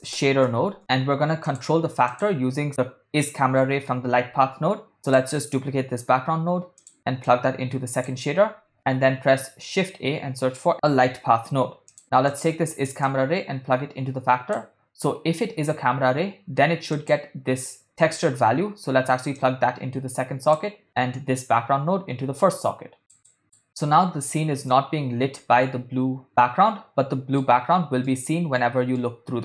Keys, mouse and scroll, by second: 5.3 click, 7.2 shift+d, 7.4-10.7 drag, 13.0-17.9 drag, 19.5-23.6 drag, 24.8-27.6 middle drag, 28.2-28.7 middle drag, 29.1-29.4 middle drag.